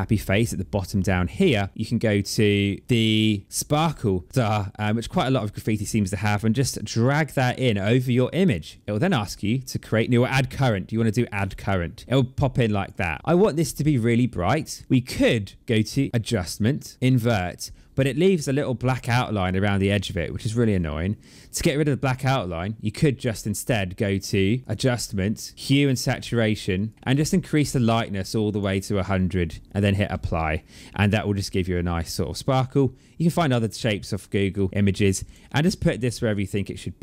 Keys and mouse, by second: 2.8 click, 3.5 click, 6.9 click, 11.4 click, 13.5 click, 15.7 click, 17.1 click, 24.6 click, 26.8 click, 27.6 click, 29.5 click, 32.4 click, 34.0 click, 36.9 click.